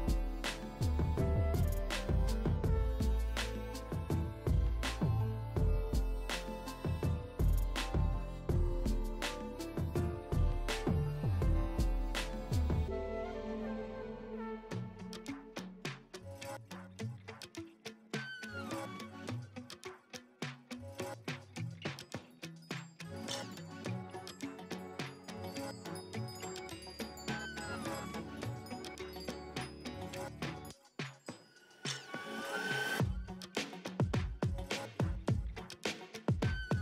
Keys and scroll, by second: 2.7 [, 7.9 ], 8.1 [, 8.8 [, 9.0 ctrl+alt+z, 12.8 space, 13.2 space, 14.6 [, 20.4 space, 20.9 space, 21.6 ], 35.4 ], 35.7 [, 35.9 space, 36.3 1.